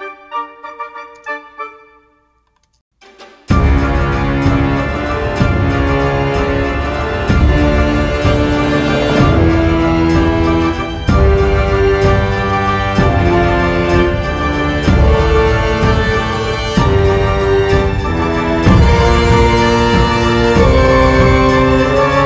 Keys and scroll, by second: 1.3 space, 2.9 space.